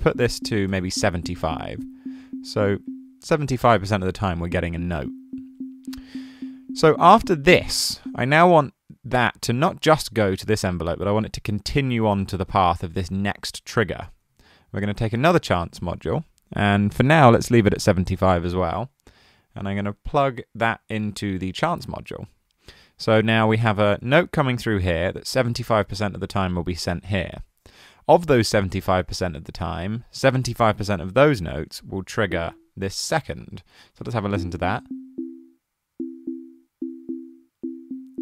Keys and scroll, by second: 0.0-0.5 typing, 0.7 Return, 14.3 super+c, 15.0 super+v.